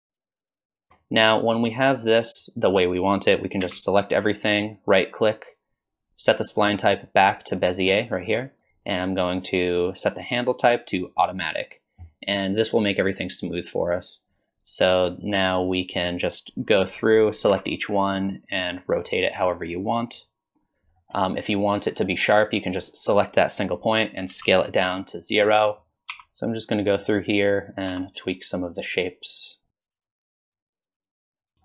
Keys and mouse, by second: 0.0-0.1 typing, 0.5 click, 0.9 shift+middle click, 3.6 a, 4.7-7.9 drag, 11.0 click, 14.9-17.5 drag, 17.5 r, 21.9 click, 24.3 s, 26.1 r, 27.5 click, 27.9 r, 30.0 s, 30.2 click, 30.5 shift+middle click, 30.9 s, 31.4 click, 31.5 Tab, 31.5 n.